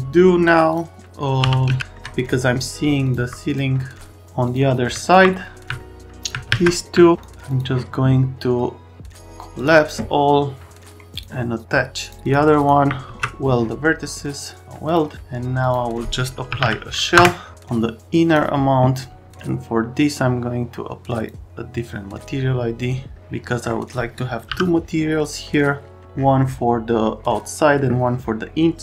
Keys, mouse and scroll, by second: 1.4 t, 6.5 alt+q, 7.0 alt+middle click, 7.1 click, 7.5 click, 9.6 click, 11.1 click, 12.0 click, 12.2 click, 12.6 click, 13.1 ctrl+a, 14.9 click, 15.6 click, 16.2-17.1 typing, 17.1 Return, 17.5 click.